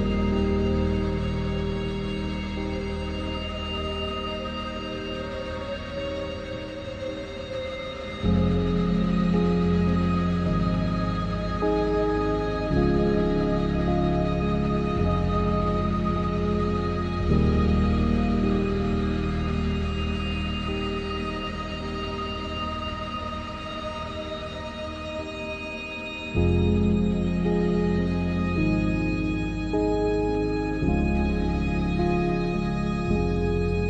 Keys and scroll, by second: 3.8 ctrl+r, 6.0 ctrl+r, 8.2 Tab, 9.5 Tab, 11.1 Tab, 14.5 ctrl+z, 16.1 Tab, 17.3 w, 17.8 i, 19.3 ctrl+z, 19.7 i, 21.8 e, 30.0 ctrl+r, 31.6 ctrl+r.